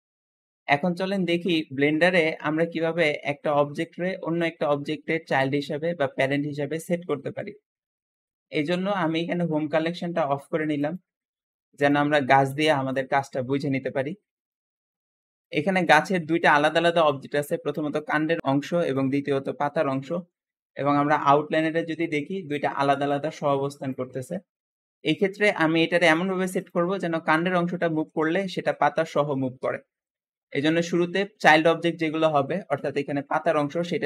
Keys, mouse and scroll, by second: 0.0-4.1 shift+middle drag, 4.1-4.5 scroll up 1, 4.5-10.4 shift+middle drag, 10.7 click, 11.7 click, 12.2 g, 13.3-15.3 middle drag, 15.3 click, 15.7 g, 16.9 click, 17.2 g, 18.7 click, 19.0 g, 24.5 Escape, 24.9-25.9 shift+middle drag, 25.9 scroll up 1, 26.5 shift+click, 26.8-27.3 scroll down 1, 27.3 g, 29.8 Escape, 30.0-30.6 scroll up 1, 30.6 click.